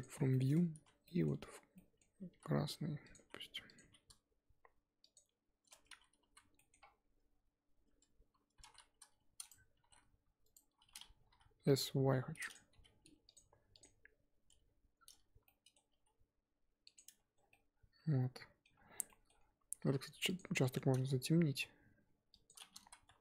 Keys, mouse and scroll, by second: 0.0 u, 0.7 a, 2.3 g, 3.2 s, 3.8 g, 5.7 Tab, 6.3 z, 6.5 middle click, 6.8 scroll up 4, 7.9 Tab, 8.6 s, 9.7 s, 12.7 g, 13.3 Tab, 13.8 click, 14.5 Tab, 15.9 g, 17.0 Tab, 17.3 scroll down 2, 17.5-18.7 middle drag, 18.7-19.0 scroll up 4, 19.0 middle click, 19.4 scroll up 1, 19.5 Tab, 19.8 3, 20.3 alt+click, 21.5 g, 22.8 ctrl+z.